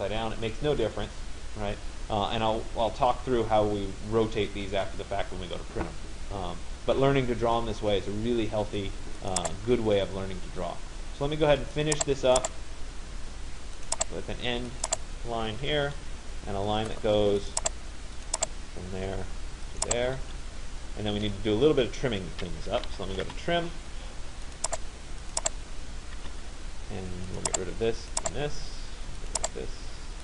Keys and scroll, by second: 19.9 Return, 22.8 t, 23.4 Return.